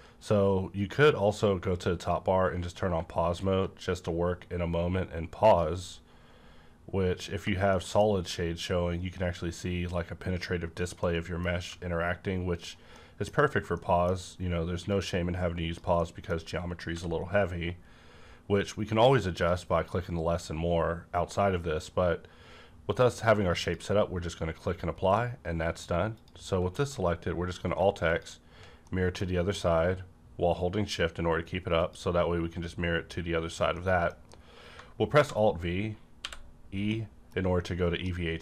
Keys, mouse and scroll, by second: 2.5 scroll up 1, 3.4-7.7 drag, 7.7 middle click, 11.0-12.6 middle drag, 11.7 g, 12.6 click, 12.9 middle click, 13.0 middle click, 13.4-13.8 scroll up 1, 13.8-16.0 middle drag, 15.2-16.0 drag, 16.0 middle click, 16.9 b, 17.5-18.6 scroll up 1, 18.6-19.4 scroll up 1, 19.4 click, 23.6 click, 23.6 click, 25.1-26.6 middle drag, 26.1 click, 26.6 alt+x, 28.1 shift+click, 28.9-33.3 middle drag, 31.8 click, 33.3-33.7 scroll down 1, 33.7-36.1 middle drag, 35.1 v, 36.1 e, 36.9-38.4 middle drag.